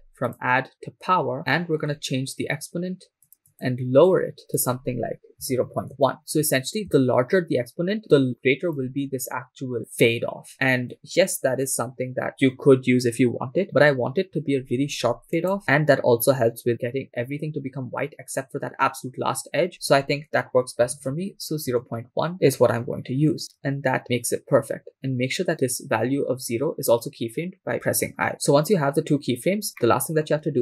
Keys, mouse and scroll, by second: 0.3-1.4 drag, 1.4 middle click, 1.9-3.2 scroll up 2, 3.5 click, 4.6-6.0 drag, 6.9-9.4 shift+drag, 15.4-21.7 drag, 28.3 click, 28.3-30.1 scroll down 8, 30.1-30.6 middle drag.